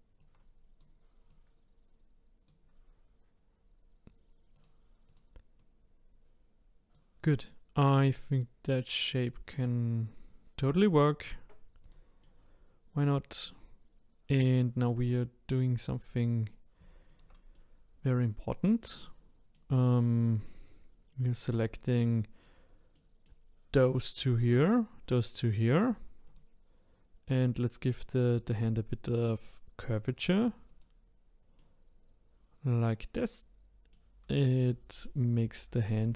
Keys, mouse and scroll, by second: 0.2 click, 1.3 click, 4.5 click, 5.0 click, 5.6-8.6 drag, 9.3-10.3 drag, 11.2-11.8 scroll down 4, 11.8 click, 12.2-13.2 middle drag, 13.3-15.2 middle drag, 15.8 click, 17.1 shift+click, 17.5 middle click, 18.5 middle click, 19.2-20.3 middle drag, 20.3 shift+click, 21.2 shift+click, 21.7-23.0 middle drag, 24.4 middle click, 24.5-26.2 middle drag, 26.2 click, 27.6 click, 30.7 click, 31.6 middle click, 33.5 middle click, 33.8-36.1 middle drag.